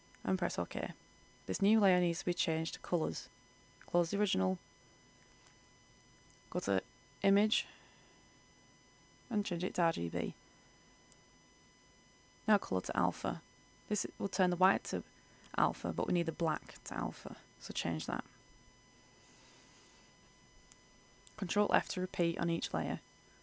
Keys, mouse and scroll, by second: 21.6 ctrl+f, 22.7 click.